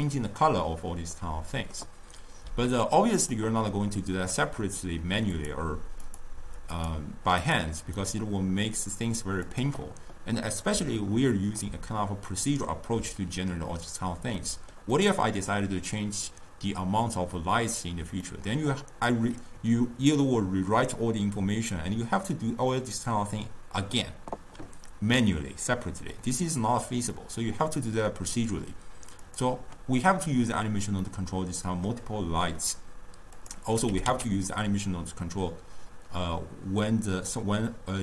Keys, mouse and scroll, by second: 1.2-3.0 middle drag, 3.0-4.4 drag, 5.4 click, 6.1 click, 6.8 click, 7.5 click, 8.0 click, 9.5 click, 11.7-18.1 middle drag, 18.3-21.5 middle drag, 25.8-29.3 middle drag, 29.3 click, 31.1-33.5 middle drag, 33.5 click, 34.0 g.